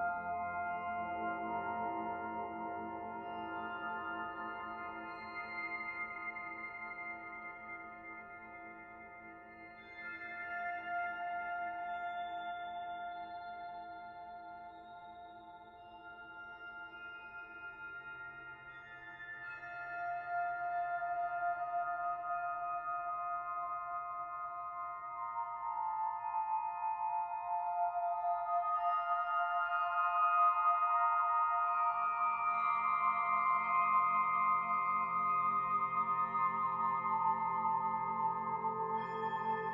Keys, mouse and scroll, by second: 1.3 click, 3.2 middle click, 4.0 shift+middle click, 4.6-5.2 scroll up 1, 5.2 middle click, 6.4 click, 7.0 Tab, 8.0 click, 10.4 s, 15.1 middle click, 16.7 click, 19.7 middle click, 20.7 middle click, 22.1 click, 23.2 s, 25.4 click, 27.8 middle click, 28.4 Tab, 28.9-30.0 scroll down 2, 29.2 middle click, 32.6 shift+middle click, 33.5-33.9 scroll down 2, 33.9 middle click, 35.6-35.9 scroll up 2, 36.1 shift+middle click, 36.3 click, 38.1 shift+a.